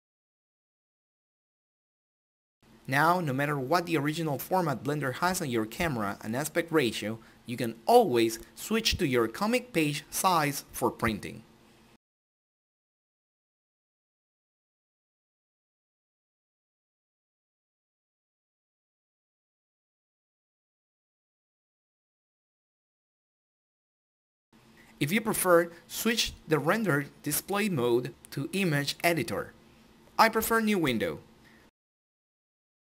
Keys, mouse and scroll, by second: 0.0 click, 5.8 click, 7.0 click, 8.7 click, 14.1 click, 22.2 click.